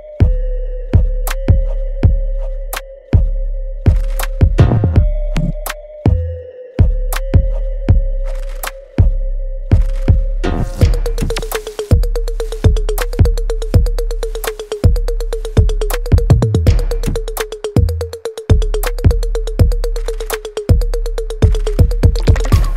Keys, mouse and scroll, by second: 2.6 right click, 3.4 click, 3.7 alt+click, 4.5 alt+middle click, 5.1 right click, 6.2 click, 12.9 click, 15.9 right click, 18.0 click, 18.6 shift+click.